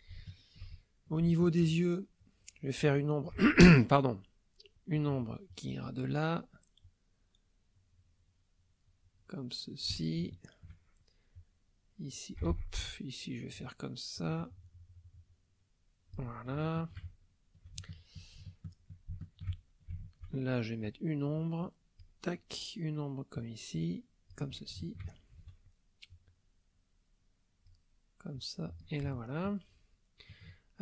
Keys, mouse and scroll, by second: 0.3 ctrl+shift+middle click, 0.3 ctrl+shift+click, 0.8 ctrl+shift+click, 2.2-3.6 drag, 3.5 ctrl+z, 5.0-6.0 drag, 6.8-10.1 drag, 10.3 shift+click, 11.4-12.5 drag, 12.5 ctrl+z, 12.7-16.3 ctrl+drag, 16.6 shift+click, 17.1 ctrl+shift+middle click, 17.2 ctrl+shift+middle click, 17.2 ctrl+shift+click, 17.8 ctrl+shift+middle click, 18.6 ctrl+shift+middle click, 19.2-20.4 ctrl+shift+middle drag, 20.9-22.2 drag, 23.3-24.5 drag, 24.8 ctrl+shift+click, 26.1-27.9 drag, 28.3 click, 29.1-30.4 shift+drag, 30.6 shift+click.